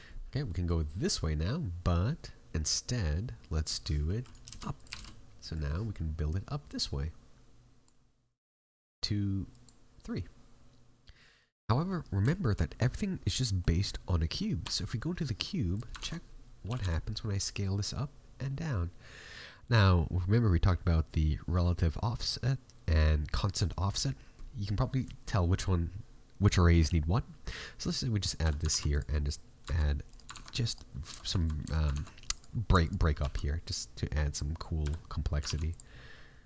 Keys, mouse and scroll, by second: 0.4 middle click, 4.2 click, 9.4 click, 10.1 middle click, 12.3 shift+middle click, 12.9-13.3 scroll up 2, 13.3 middle click, 14.6 Tab, 15.6 right click, 15.9 ctrl+Tab, 16.6 g, 28.2 scroll up 2, 28.4 a, 28.6 ctrl+r, 30.2 ctrl+Tab, 31.0 Tab, 31.8 ctrl+Tab, 32.7 alt+right click, 33.1 alt+e, 34.7 a, 35.4 ctrl+r.